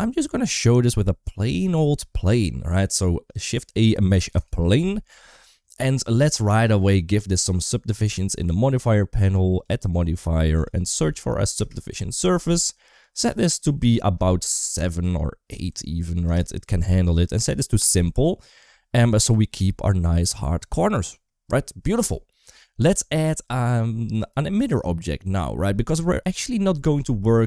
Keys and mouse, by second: 1.6 shift+a, 7.8 click, 9.0 click, 9.4-11.4 drag, 12.9-16.1 drag, 17.6 click, 24.3 shift+middle drag, 25.1 middle click, 25.9 shift+middle click.